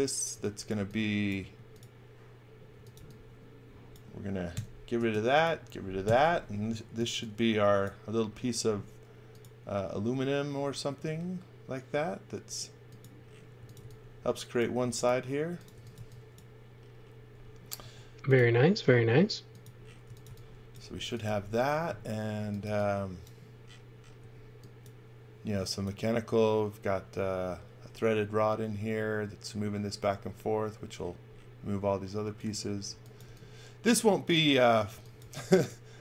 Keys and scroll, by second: 0.3-3.4 typing, 4.5 BackSpace, 4.9 space, 6.1 Delete, 6.5-7.4 typing, 8.6 b, 13.3-16.4 typing, 17.8 m, 19.8-22.6 typing, 24.1 x, 25.5 x, 32.2 x, 33.2 v, 34.9 x, 35.2 v.